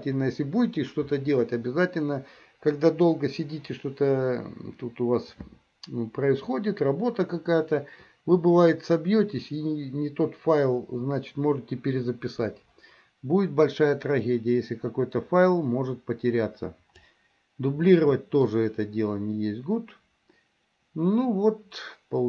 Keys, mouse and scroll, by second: 14.2-18.6 drag, 18.6-22.2 middle drag.